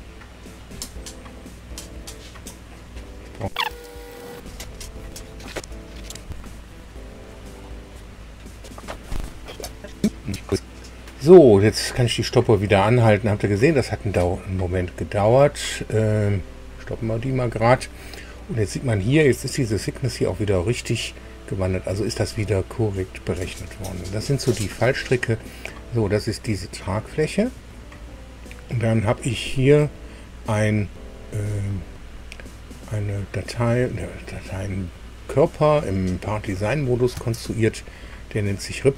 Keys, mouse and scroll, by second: 1.3 click, 4.6 click, 8.1 click, 16.3 click, 22.9-23.3 scroll up 2, 23.6 scroll down 2, 24.1-26.4 middle drag, 29.5 click, 36.3 click.